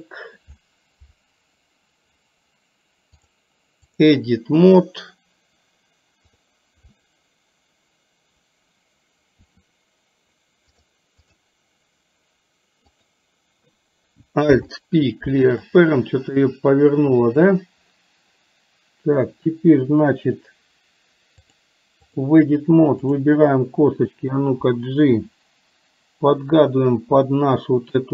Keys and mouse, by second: 3.2-4.2 drag, 9.4 r, 10.9 click, 14.5 alt+p, 17.2 click, 21.6 click, 25.1 g.